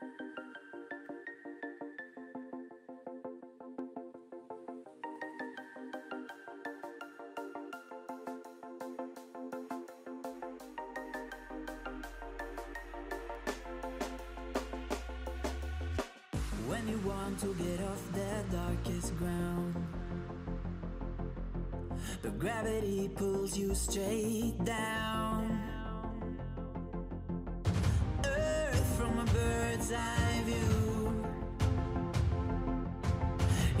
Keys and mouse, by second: 1.9 middle click, 2.6 middle click, 4.1 middle drag, 4.6-5.9 middle drag, 5.9-8.3 typing, 8.4 Tab, 8.7 right click, 9.8-11.0 typing, 10.2 Tab, 11.5 Delete, 12.5 a, 13.5 a, 14.9 z, 16.0 middle click, 17.7 a, 20.6-24.2 middle drag, 23.4 a, 24.2 a, 25.0 k, 29.3 middle drag, 29.6 a, 29.7-30.2 right drag, 30.9-33.8 typing, 31.8 right click.